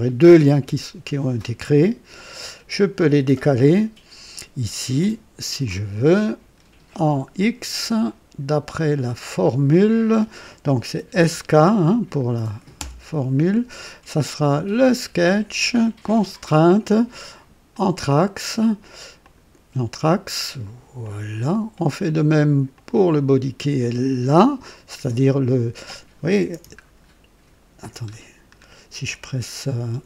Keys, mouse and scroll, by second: 2.0 click, 4.9 click, 5.6 click, 9.2 click, 11.0 typing, 12.7 typing, 14.7 click, 15.9 click, 17.6 click, 19.1 click, 20.9 click, 22.6 click, 26.7 ctrl+scroll up 2, 28.0-28.6 scroll down 4.